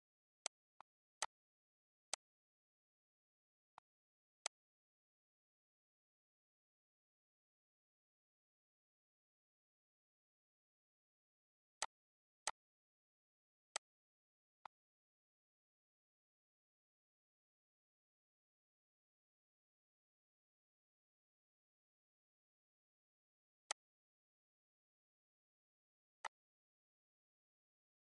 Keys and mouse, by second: 0.3 click, 2.0 click, 2.8 ctrl+s, 3.7 click, 4.3 click, 5.4-8.1 typing, 8.7 ctrl+a, 9.9-11.1 typing, 11.6 click, 12.4 shift+click, 13.5 click, 14.4 click, 14.7-16.9 typing, 18.7-20.4 typing, 23.6 click, 25.3 Delete, 26.1 click.